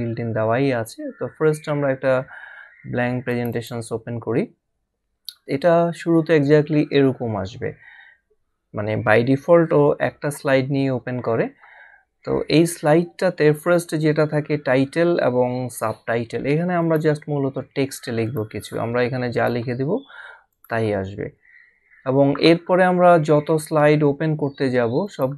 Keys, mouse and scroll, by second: 3.3 click, 16.8 click, 18.3 click, 25.0 click.